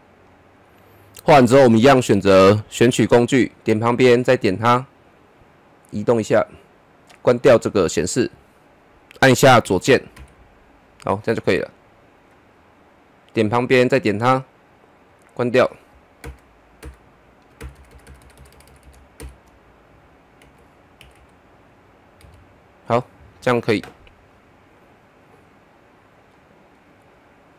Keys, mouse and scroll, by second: 2.0-8.0 drag, 9.4 Left, 12.1 click, 16.2 shift+Right, 17.6-19.0 Right, 19.2 shift+Right, 20.4 Left, 25.0 click, 25.7-26.3 scroll down 1, 26.3-27.5 middle drag.